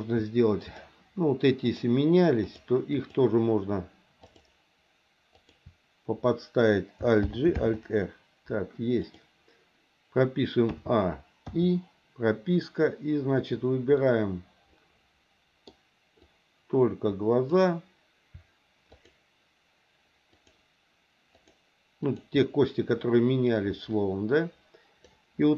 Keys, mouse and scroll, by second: 0.6 shift+click, 1.7 shift+click, 2.4 shift+click, 2.9 shift+click, 4.2 shift+click, 5.4 shift+click, 7.2 alt+g, 7.5 alt+r, 9.0 click, 10.7 a, 11.5 i, 13.9-15.7 middle drag, 16.2-17.6 drag, 20.3 shift+click, 21.4 shift+click, 22.0 shift+click, 25.1 click.